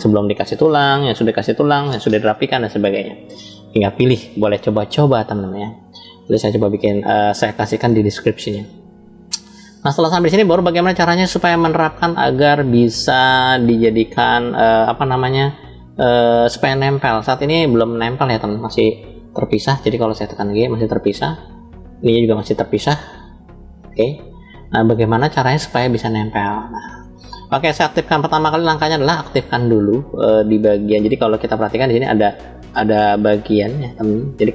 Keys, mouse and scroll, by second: 4.5 click, 5.3-6.2 scroll up 1, 6.3-7.7 shift+middle drag, 8.7 click, 11.6-12.7 middle drag, 13.0-13.8 shift+middle drag, 17.6 click, 19.5 g, 21.0 right drag, 21.7 click, 23.0 g, 24.0-24.7 right drag, 24.7-25.3 middle drag, 25.4 middle click, 25.4 scroll down 2, 26.1 click, 31.4-32.0 drag, 33.3-34.5 drag.